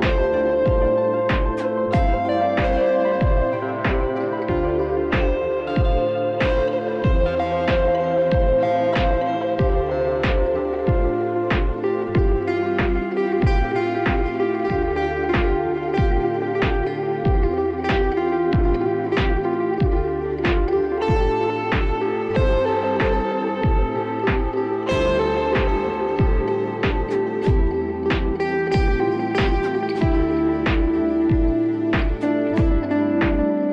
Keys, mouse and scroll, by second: 0.4 click, 0.8 click, 1.2-2.6 scroll, 2.6 click, 3.4 click, 8.5 click, 8.5 ], 9.1 ], 9.9 right click, 11.1 click, 12.5 click, 14.5 click, 15.2 click, 16.8 click, 17.7 click, 19.3 click, 20.0 click, 20.5 click, 22.8 click, 23.8-26.0 ], 26.0 [, 27.0 click, 27.5 click, 27.6 click, 27.7 click, 27.8 click, 28.0 click, 28.1 click, 28.2 click, 28.5 click, 28.6-29.0 click, 28.8 click, 28.9 click, 29.5 click, 29.6 click, 29.9 click, 30.2 click, 30.6 click, 30.7 click, 30.8 click, 31.7 click, 32.1 click.